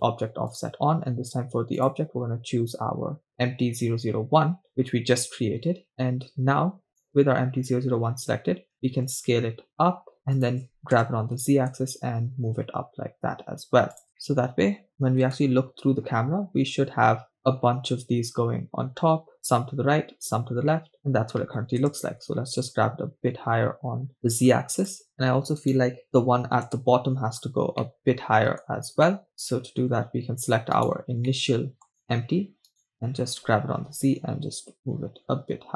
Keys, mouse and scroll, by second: 2.9 click, 4.7 scroll down 3, 5.3-7.0 scroll down 3, 7.2 right click, 9.2 shift+s, 10.4 shift+click, 11.2 g, 11.7 z, 14.0 shift+click, 14.3-15.0 middle drag, 15.3 KP_0, 21.8 g, 22.3 z, 24.9-25.5 drag, 26.5 right click, 26.8 KP_0, 27.9 middle click, 28.8-29.1 scroll down 2, 29.3 middle click, 31.3 right click, 31.5-31.9 middle drag, 32.0 right click, 33.8 g, 34.0 z.